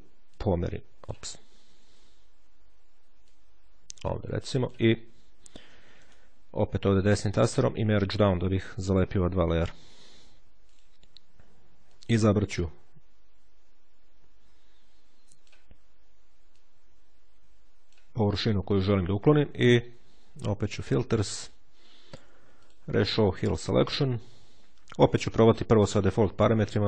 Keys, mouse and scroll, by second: 0.2-1.5 drag, 1.7 ctrl+z, 2.8-5.1 drag, 5.9 right click, 7.9 click, 10.6 click, 11.8-15.8 drag, 16.4-18.3 drag, 20.5 click, 22.3 click.